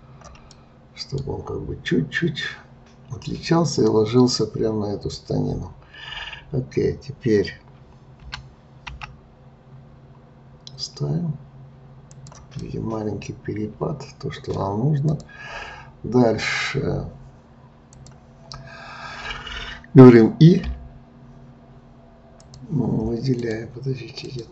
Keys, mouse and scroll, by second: 0.5-3.5 middle drag, 8.2 g, 12.6-15.1 middle drag, 15.1 click, 17.9-20.7 drag, 22.3 click, 23.4-24.5 drag.